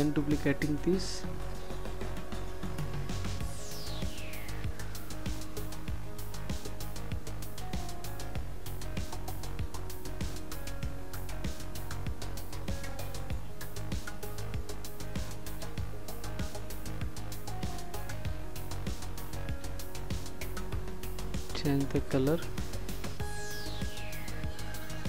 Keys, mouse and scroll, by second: 6.2 click.